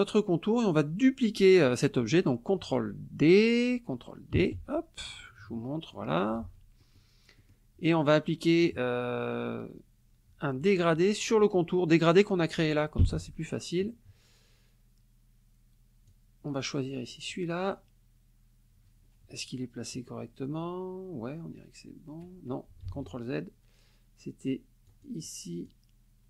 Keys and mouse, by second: 1.4 middle click, 4.3 ctrl+d, 5.1 click, 6.4 ctrl+z, 6.8 ctrl+middle click, 7.0 ctrl+click, 7.4 ctrl+click, 8.3 click, 13.0 g, 16.1-17.5 drag, 22.9 ctrl+z, 24.9 click, 25.7-26.2 drag.